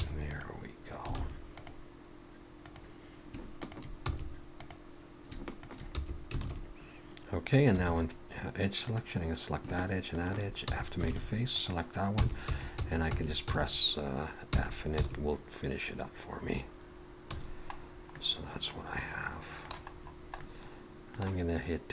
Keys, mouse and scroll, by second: 0.0 f, 0.3 click, 1.2 alt+a, 1.5 click, 2.6 click, 3.6 shift+click, 4.1 f, 4.5 click, 5.6 click, 6.0 f, 6.4 alt+a, 7.7 2, 8.8 click, 10.1 shift+click, 10.7 f, 11.1 alt+a, 11.6 click, 12.0-13.5 typing, 14.5 f, 14.9 f, 17.3 a, 17.8-18.1 scroll down 2, 18.2 middle click, 19.9-21.1 scroll up 2, 20.4 middle click.